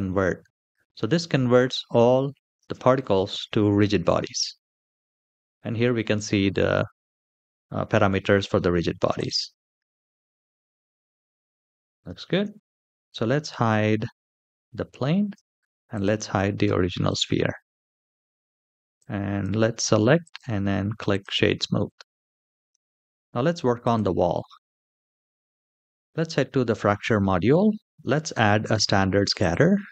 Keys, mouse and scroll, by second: 2.3 space, 6.8 space, 8.9 click, 9.2 space, 11.8 space, 12.3 shift+middle click, 13.2 shift+middle drag, 13.8 middle drag, 15.1 h, 15.6 click, 16.4 h, 17.0 shift+middle click, 18.1 click, 18.7 click, 20.0 right click, 21.4-22.0 middle drag, 22.3 shift+middle drag, 23.6 click, 25.9 click, 27.9 click, 29.1-29.9 drag.